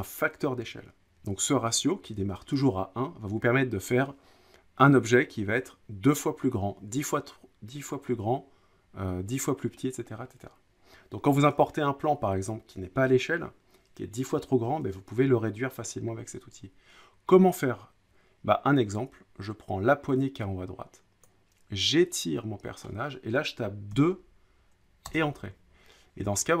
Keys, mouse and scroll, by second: 22.8 click, 23.9 2, 25.1 Return, 26.4-26.6 scroll.